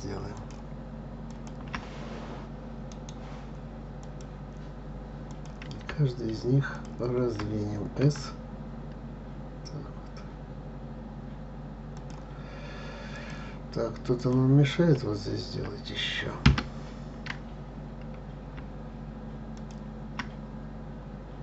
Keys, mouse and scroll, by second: 0.3 shift+click, 1.3 shift+click, 2.9-5.3 right drag, 5.3 click, 6.7 shift+click, 8.0 s, 13.1 click, 14.2 click, 14.9 s, 19.5 shift+click.